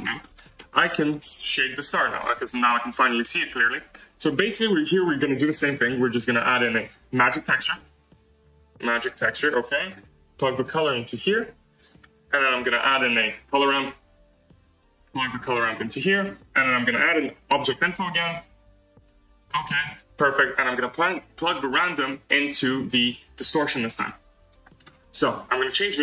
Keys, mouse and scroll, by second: 0.2 scroll up 4, 0.5-0.9 middle drag, 0.9 click, 2.1 click, 2.4-2.9 scroll up 4, 3.1-3.6 middle drag, 3.6 scroll down 1, 11.3 click, 23.7 click, 24.4-26.0 drag.